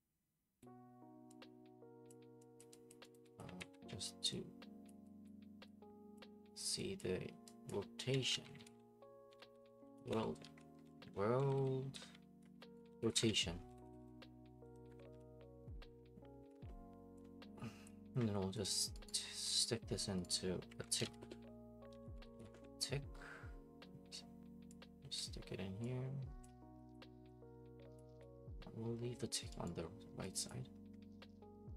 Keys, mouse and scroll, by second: 0.6 click, 2.1 click, 2.6 click, 2.9 click, 3.1 right click, 3.4 click, 3.6 ctrl+d, 4.9 click, 5.3 click, 6.2 click, 7.0 click, 7.7 click, 7.8-15.4 typing, 15.9 Up, 16.4 Down, 16.5-17.2 typing, 17.8 click, 18.7 click, 19.1 right click, 19.2 scroll, 19.6 right click, 20.2 right click, 20.5-22.9 typing, 23.1 scroll, 25.1 click, 26.4 click, 26.5 scroll, 26.9 click, 28.0 click, 29.3 click, 29.6 right click, 29.8-30.5 scroll, 30.5 click.